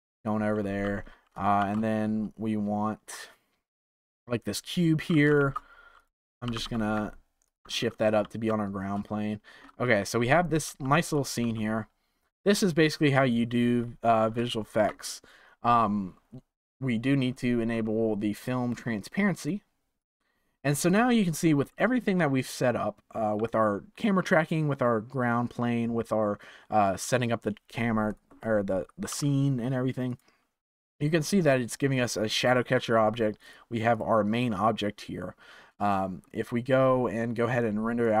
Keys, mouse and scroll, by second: 1.5 shift+a, 5.0 g, 6.4 g, 8.2 z, 9.0-10.2 shift+middle drag, 10.2 click, 10.6 s, 11.3 z, 13.7-14.4 scroll down 3, 14.4-16.6 shift+middle drag, 16.6 click, 17.6 scroll down 3, 18.3-18.6 drag, 18.7 scroll down 4, 19.3 click, 19.9 click, 20.0-20.8 right drag, 20.8 click, 28.0 click, 29.0 s, 30.7 scroll up 2, 33.3 click, 33.9 click, 35.8-37.4 shift+middle drag, 37.4-38.2 drag.